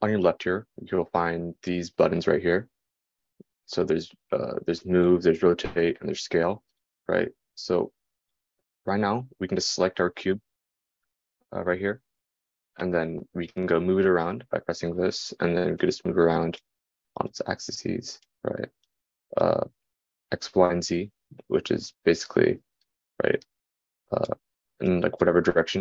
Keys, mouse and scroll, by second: 13.2-19.5 drag.